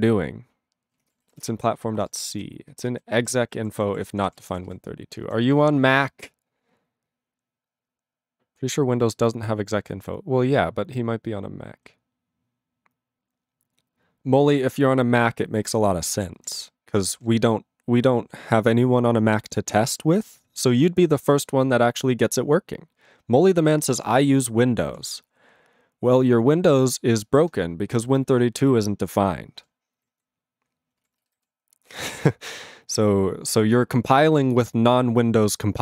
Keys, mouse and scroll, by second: 1.2 ctrl+n, 1.5 Return, 2.0 alt+<, 2.4 ctrl+n, 2.8 ctrl+space, 2.9 ctrl+n, 3.2 ctrl+g, 3.6 ctrl+=, 4.1 ctrl+p, 4.2 ctrl+p, 4.4 ctrl+space, 4.4 ctrl+e, 4.6 ctrl+g, 5.2 ctrl+n, 15.5 ctrl+n, 16.0 ctrl+p, 16.4 ctrl+n, 16.5 ctrl+e, 16.5 ctrl+n, 16.9 ctrl+p, 17.1 ctrl+p, 17.2 ctrl+a, 17.5-18.4 ctrl+n, 23.9-24.9 ctrl+p, 27.4 ctrl+e, 30.7 ctrl+n, 30.9 ctrl+p, 31.0 ctrl+e, 31.4 alt+b.